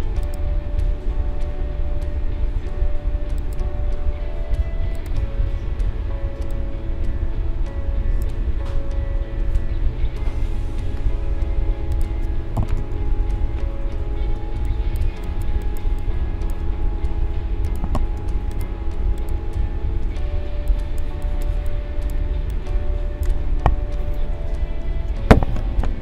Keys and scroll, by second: 12.8 ctrl+=, 14.3 space, 20.4 space, 24.8 shift+b.